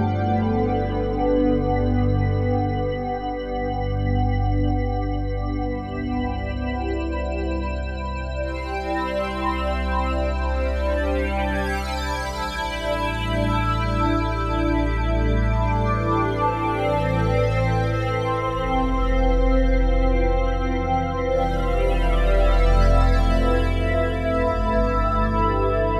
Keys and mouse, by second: 0.5 click, 1.9 click, 3.4 alt+shift+click, 4.0 ctrl+alt+click, 4.8 click, 6.0 click, 6.7 ctrl+alt+click, 7.2 alt+shift+click, 8.1 click, 9.3 click, 10.4 click, 14.4 click, 18.2-19.2 drag, 20.9 click, 22.1 alt+click, 23.5 click.